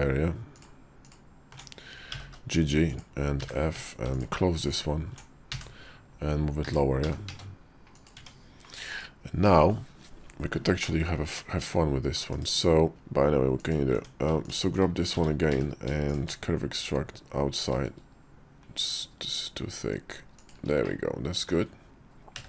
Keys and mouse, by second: 0.4 alt+click, 2.0 g, 3.3 f, 3.6 Tab, 4.6 alt+click, 5.4 f, 6.5 f, 6.9 g, 8.0 Tab, 8.8 /, 10.7-12.1 middle drag, 12.2 /, 12.9 s, 13.8 Tab, 15.0 w, 15.4 q, 20.7 middle click, 22.2 `, 22.2 d.